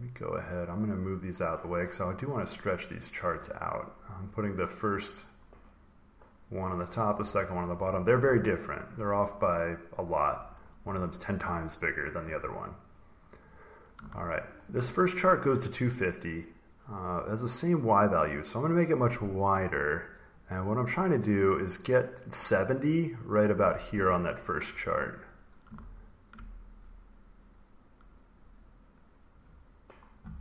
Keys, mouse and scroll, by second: 2.8 click, 3.7 click, 6.3-8.3 drag, 13.1 click, 14.1 ctrl+scroll, 18.7 click, 21.3 click, 23.2 click, 24.1-25.7 ctrl+scroll, 25.7 ctrl+scroll, 26.4-27.6 scroll, 28.8 click.